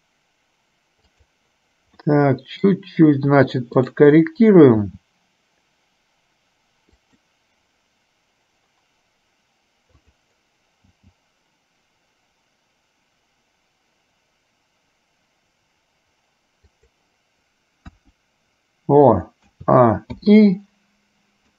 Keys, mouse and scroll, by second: 2.2 middle click, 4.0 click, 5.0 g, 11.1 g, 18.0 KP_1, 19.6 a.